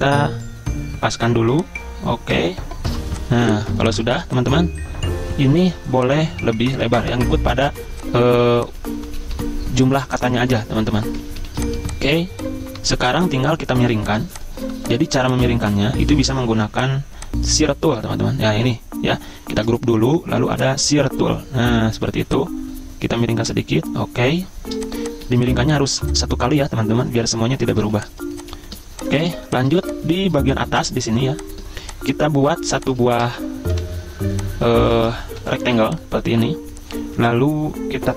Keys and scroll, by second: 2.9 v, 3.3 z, 4.1 v, 8.5 z, 9.0 v, 9.4 a, 11.5 z, 12.1 v, 13.9 z, 14.7 v, 19.6 ctrl+g, 25.3 z, 26.0 v, 27.8 z, 29.3 v, 35.6 m.